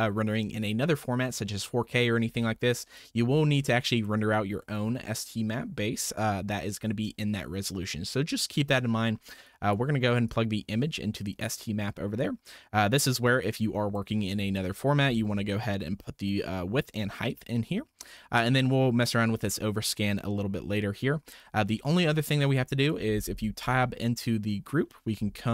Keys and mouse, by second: 2.9-4.0 drag, 9.4-9.7 drag, 10.3-11.5 drag, 13.2 click, 21.2-21.7 middle drag, 22.8 click, 23.6 Tab, 24.4-24.8 middle drag.